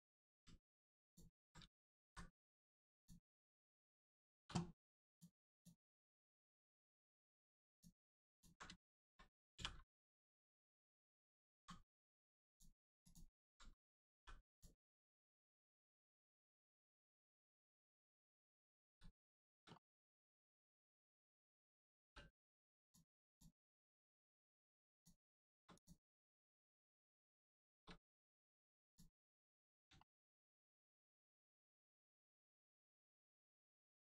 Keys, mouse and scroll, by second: 1.0 alt+shift+click, 2.9 alt+shift+click, 4.3 2, 5.1 click, 5.5 alt+click, 6.2 click, 8.2 alt+click, 8.6 shift+click, 8.7 shift+middle click, 9.9 middle click, 10.4 shift+middle click, 10.8 scroll up 1, 12.4 click, 13.0 alt+click, 14.1 click, 14.5 click, 15.0 alt+middle click, 15.9 scroll down 1, 16.1 middle click, 16.7 shift+middle click, 17.3 middle click, 17.3 middle click, 18.0 shift+middle click, 18.7 scroll up 1, 19.2 shift+middle click, 22.0 middle click, 22.0 3, 22.8 click, 24.9 shift+click, 25.7 click, 27.2 shift+click, 28.8 click, 29.3 middle click, 29.7 scroll down 1, 29.9 shift+middle click, 31.1 middle click, 31.1 middle click, 31.9 shift+middle click, 32.4-33.2 scroll up 1, 33.2 click.